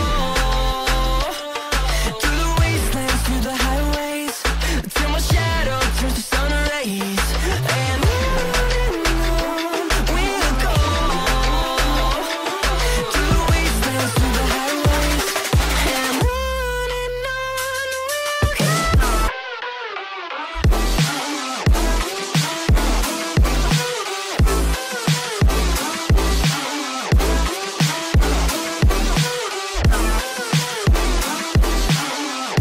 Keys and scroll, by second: 8.4 space, 10.4 shift+Page_Down, 10.8 Escape, 12.6 Escape, 16.3 shift+Page_Up, 16.8 Escape, 21.2 space, 22.5 ctrl+r, 23.4 g, 24.8 space, 28.5 g.